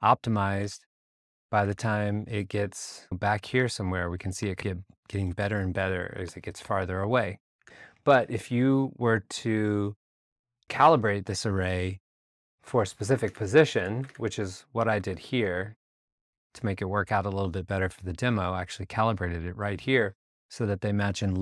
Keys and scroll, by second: 0.6 r, 1.6 alt+r, 1.7 alt+Tab, 3.0 r, 5.3 a, 7.7 alt+Tab, 13.3 alt+Tab, 14.0 alt+super+Tab, 14.9 super+Tab.